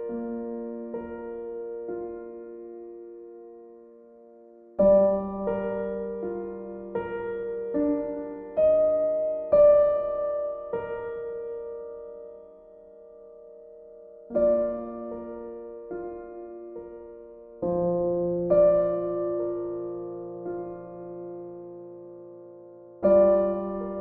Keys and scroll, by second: 2.3 ctrl+z, 14.9 b.